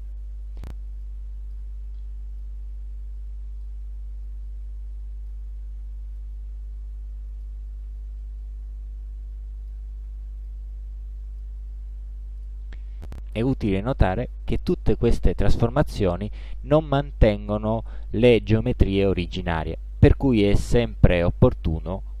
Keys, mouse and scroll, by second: 0.6 ctrl+z, 1.1-1.8 ctrl+drag, 2.5-3.9 ctrl+drag, 4.3-5.5 ctrl+drag, 5.9 ctrl+d, 6.2-7.7 ctrl+drag, 7.9 ctrl+d, 8.3-10.0 ctrl+drag, 10.1 ctrl+d, 10.5-11.7 ctrl+drag, 12.5 click.